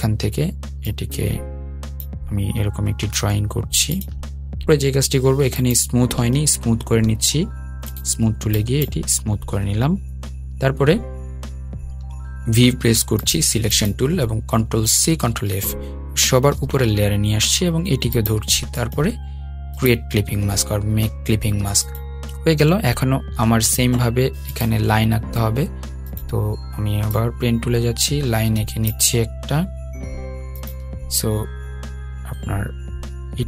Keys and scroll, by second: 15.9 super+c, 17.8 super+f.